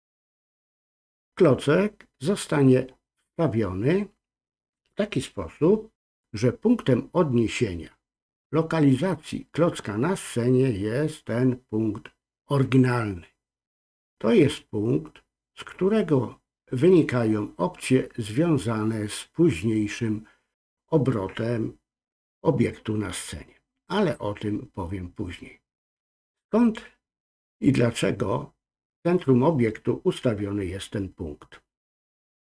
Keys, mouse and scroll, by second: 15.6-25.4 drag.